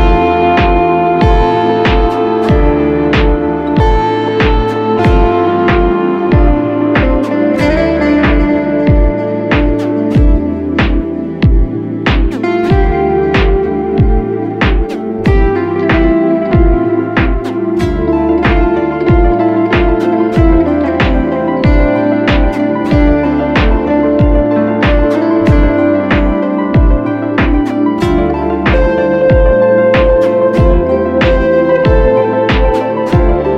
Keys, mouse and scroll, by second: 2.1 e, 19.9 double click.